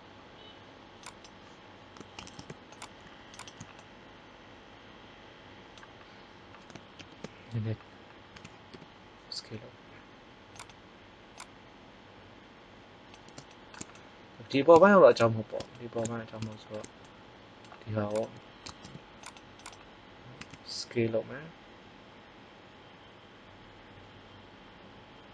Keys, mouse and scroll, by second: 1.0-2.1 right drag, 2.1 ctrl+Tab, 3.4 click, 3.8-4.9 middle drag, 6.9 ctrl+l, 8.2 s, 11.3-12.7 drag, 18.1 right click, 18.7 ctrl+Tab, 20.3 s.